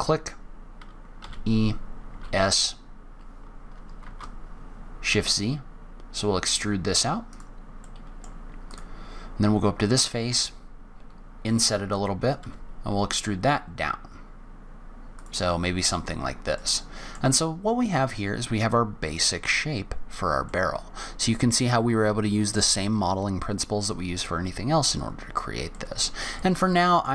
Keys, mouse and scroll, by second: 1.2 e, 7.8 middle click, 8.6 click, 10.2 i, 12.4 e, 15.6-16.3 scroll down 3, 16.3 scroll down 2, 16.5 middle click, 17.2-17.8 scroll down 2, 17.8-18.2 scroll up 1, 18.2-18.6 scroll down 2, 18.6-19.4 scroll up 2, 19.4-19.7 scroll down 1, 20.0-20.4 scroll up 1, 20.4 middle click, 24.1-24.6 scroll down 2, 24.6-25.3 scroll up 2, 25.3-25.7 scroll down 1, 25.7 middle click, 26.3 shift+middle click.